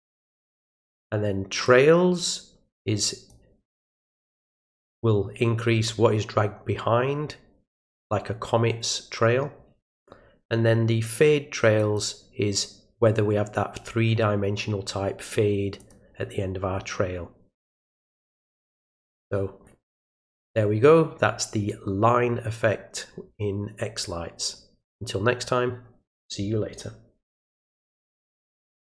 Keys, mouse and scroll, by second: 1.6-3.3 drag, 11.8 click, 15.8 click, 28.8 click.